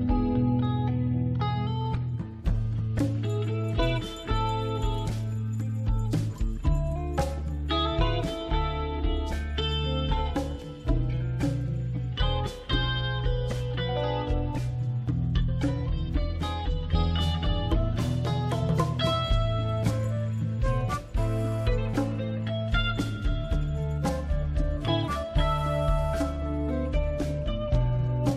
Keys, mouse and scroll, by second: 0.5 click, 2.7 click, 3.3-4.2 scroll down 2, 4.2 click, 5.4 click, 10.6 click, 12.0 click, 13.7-14.5 typing, 17.8 click, 18.2-18.9 scroll down 2, 18.9 scroll up 1, 25.0 click, 25.3 click.